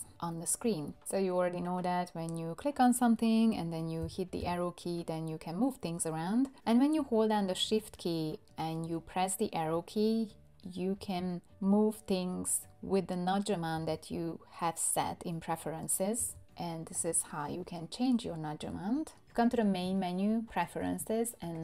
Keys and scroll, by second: 4.0 Left, 4.4 Left, 11.0 shift+Left, 13.7 shift+Left, 16.2 shift+Left.